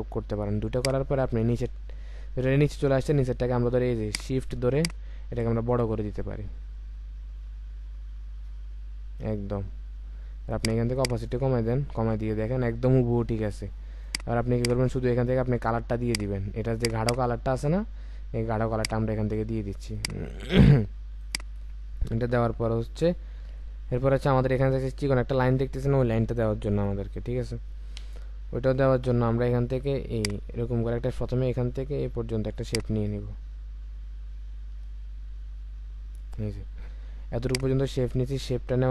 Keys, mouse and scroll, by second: 4.7 shift+click, 11.0 double click, 12.4-12.9 alt+scroll up 1, 12.9-13.4 alt+scroll down 1, 14.5 double click, 34.8 space.